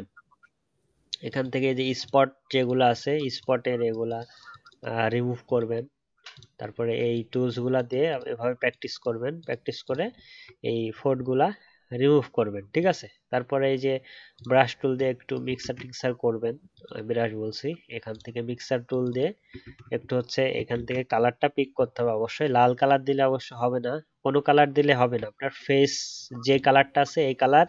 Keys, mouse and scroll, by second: 10.1 alt+scroll down 1, 10.3-10.9 alt+scroll up 1, 19.6 ctrl+z, 20.7 ctrl+z, 25.3 alt+scroll up 1.